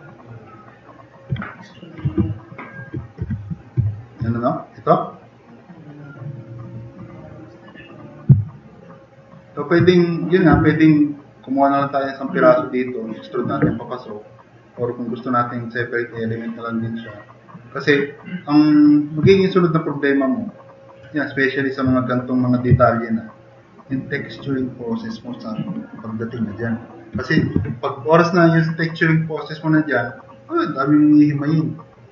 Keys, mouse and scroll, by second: 3.2 4, 3.4 click, 8.4 click, 19.5 click, 20.1 click, 21.4 drag, 22.7-23.2 drag.